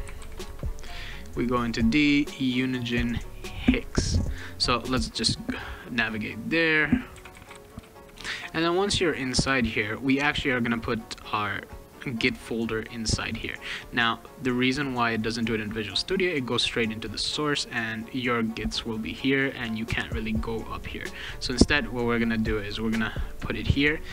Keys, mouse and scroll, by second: 0.0-0.7 typing, 2.1 click, 2.3 click, 3.4 click, 3.5 click, 4.3 click, 6.9-8.5 typing, 16.5 click, 16.7 click, 19.8 click, 22.3 click, 22.5 click, 23.1 click, 23.8 click.